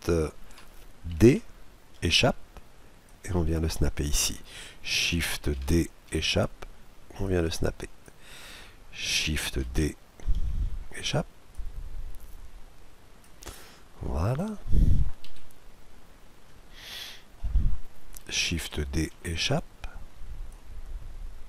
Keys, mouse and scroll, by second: 1.1 shift+d, 3.1-4.8 drag, 5.6 shift+d, 7.2-9.1 drag, 9.6 shift+d, 11.5-13.5 drag, 13.5-15.3 middle drag, 15.3 KP_Decimal, 15.8-17.0 scroll down 1, 17.0-18.9 middle drag, 18.6 shift+d, 20.5-21.4 drag.